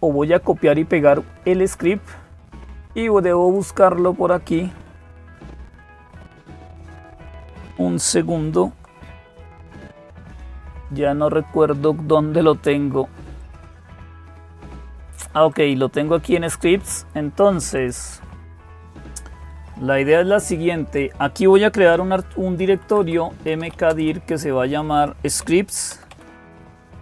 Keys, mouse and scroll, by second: 0.0-27.0 typing, 3.2-9.6 drag, 9.6 super+c, 13.2-14.3 drag, 15.3-16.4 drag, 17.5 click.